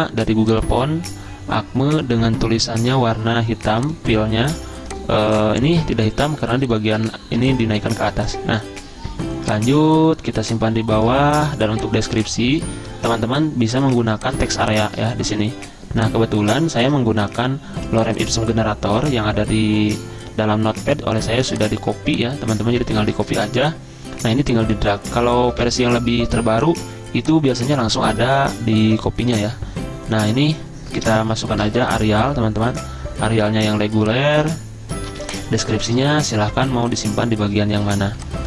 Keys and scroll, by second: 2.4-3.2 typing, 7.7 typing, 14.1 z, 16.9 super+m, 22.8 ctrl+c, 23.2 alt+Tab, 25.5 ctrl+v, 31.4-32.4 typing, 35.1 z.